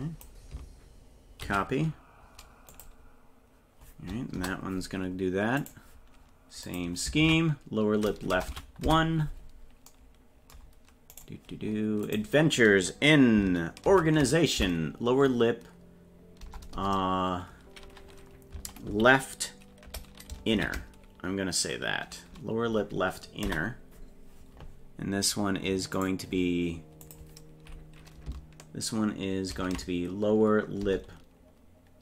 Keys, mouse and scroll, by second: 5.6 right click, 6.7-9.2 drag, 11.2 right click, 12.1-24.4 drag, 16.8 BackSpace, 26.0 right click, 27.1-32.0 drag.